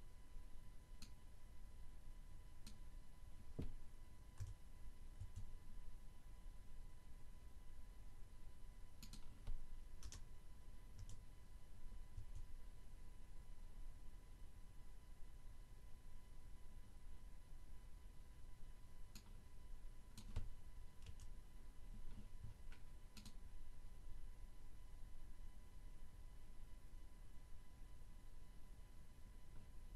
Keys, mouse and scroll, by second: 0.1 click, 2.9 h, 5.0 1, 7.6 click, 10.0 BackSpace, 10.3 h, 12.2 1, 18.8 click, 20.2 Delete, 23.2 click.